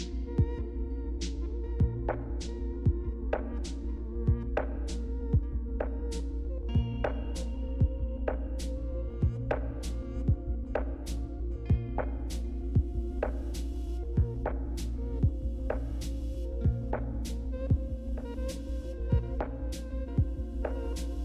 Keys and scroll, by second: 0.0-0.8 typing, 2.5 Return.